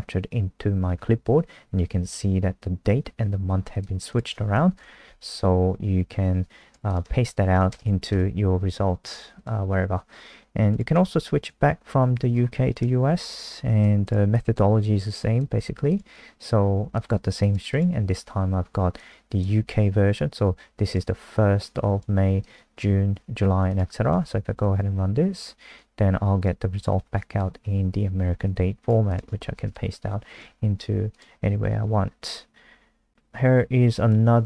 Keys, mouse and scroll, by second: 4.1 click, 4.7 Return, 4.8 ctrl+v, 6.9 shift+click, 7.4 shift+Home, 8.1 BackSpace, 9.4 click, 9.8-10.7 scroll down 3, 10.7 click, 11.3 Up, 11.6 Home, 12.3-13.3 scroll down 1, 13.3 shift+click, 13.8 ctrl+c, 14.0 click, 15.6 ctrl+v, 15.9 click, 24.1 ctrl+s, 24.6 F5, 25.8 click, 29.1 click, 29.5 Return, 29.7 ctrl+v, 30.4 ctrl+z, 31.1 click, 31.8-33.1 scroll down 1, 33.1 click.